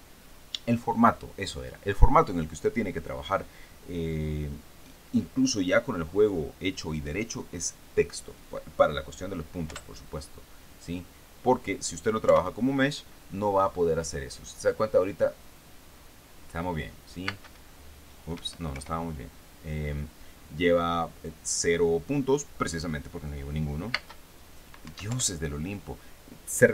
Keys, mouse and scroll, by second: 10.1 p, 12.7 p, 17.7 space, 18.8 Escape, 19.2 p, 24.4 space, 25.3 Escape, 25.5 p.